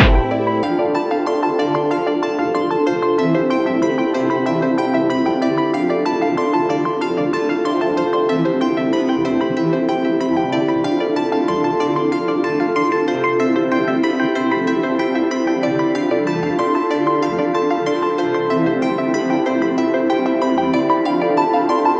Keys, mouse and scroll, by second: 1.4 right click, 11.8-14.3 typing, 16.3-17.4 typing.